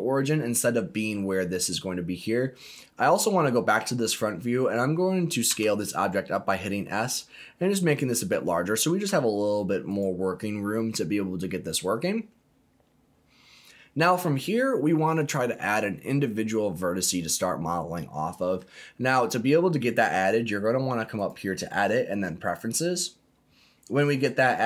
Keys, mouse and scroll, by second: 1.6-2.2 scroll down 2, 3.0 click, 4.0-4.7 scroll up 2, 5.5 s, 7.7 click, 8.1-9.0 scroll down 4, 9.0 s, 9.8 click, 10.2-12.1 scroll up 2, 21.1-22.6 drag.